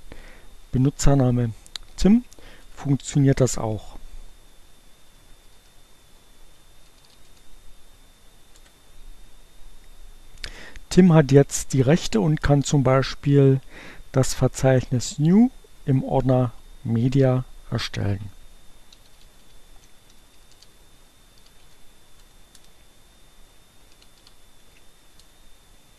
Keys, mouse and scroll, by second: 2.9 Return, 5.3-6.2 typing, 20.2-21.0 typing.